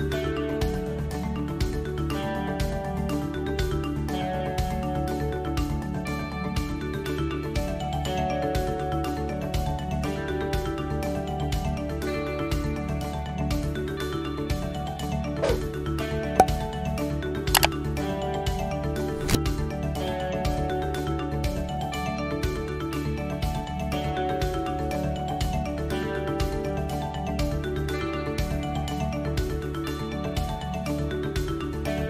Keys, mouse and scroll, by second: 0.3 click, 0.9 click, 1.4 shift+click, 2.1 shift+click, 2.7 KP_1, 4.0 e, 7.5 click, 9.1 s, 10.6 e, 13.4 middle click, 14.5 middle click, 15.2 click, 15.8 middle click, 16.7 ctrl+z, 16.8 click, 19.6 e, 21.2 middle click, 22.6 middle click, 24.0 click, 24.5 middle click, 26.7 e, 27.7 middle click, 30.2 click.